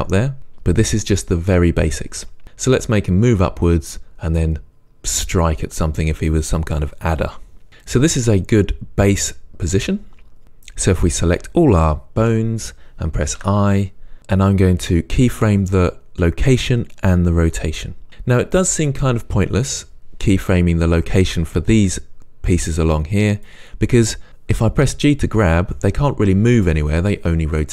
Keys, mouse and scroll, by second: 12.2 a, 13.4 i, 20.2 click, 22.7 click, 23.3 click, 24.6 g, 26.7 right click.